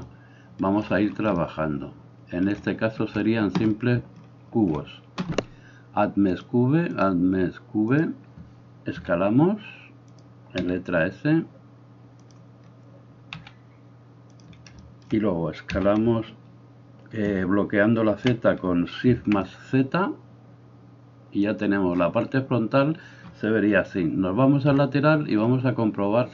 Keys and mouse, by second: 8.9 s, 10.3-26.3 middle drag, 10.6 s, 13.3 s, 15.7 s, 24.7 KP_3.